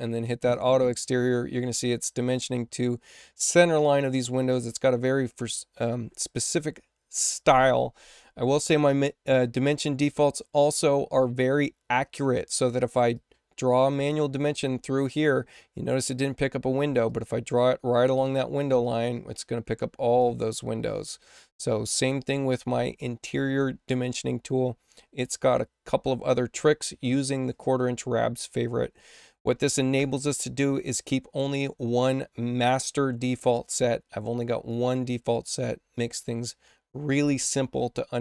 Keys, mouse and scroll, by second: 0.4 click, 10.6 click, 13.0-14.3 drag, 17.0-18.1 drag, 18.7 click, 19.7 click, 20.8 click, 34.6 click, 35.3 click.